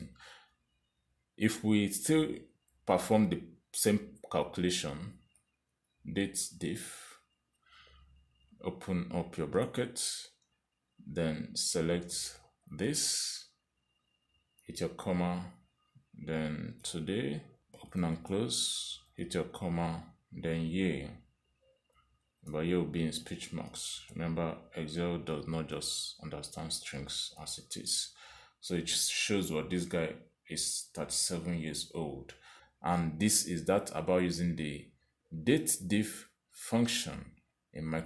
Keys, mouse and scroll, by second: 1.0 click, 2.4 =, 3.9-4.9 typing, 6.3-8.5 typing, 10.4 shift+9, 13.3 click, 15.8 ,, 17.6 typing, 18.8 shift+9, 19.1 shift+0, 20.2 ,, 23.4 shift+', 24.3 y, 25.1 shift+', 26.9 shift+0, 28.5 Return, 30.6 click, 35.4 click.